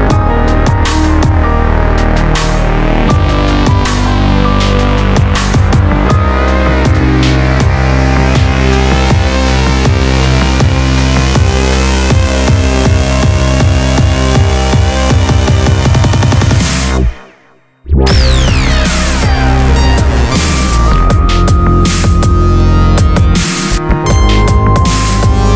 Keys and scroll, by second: 13.6 ctrl+f, 14.4 ctrl+z, 16.9 ctrl+f, 18.5 ctrl+e, 22.7 ctrl+r, 23.0 Escape.